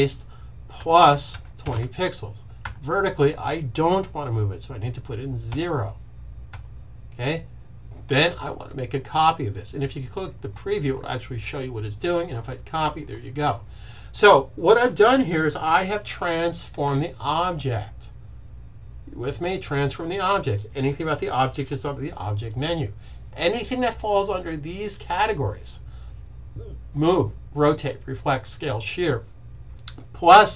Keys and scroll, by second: 1.3 typing, 5.4 0.